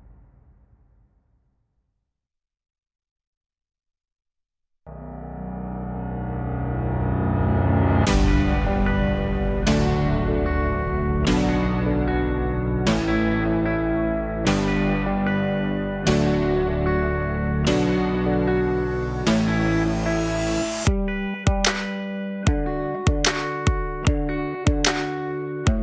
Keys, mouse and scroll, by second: 0.1 alt+click, 1.6 click, 2.4-4.1 drag, 4.1 KP_0, 8.4-9.3 scroll down 5, 9.3 scroll down 1, 9.4-14.1 alt+drag, 11.1 shift+a, 17.8 click, 18.6 KP_0, 21.4 g, 25.1 scroll down 1, 25.3-25.8 alt+drag.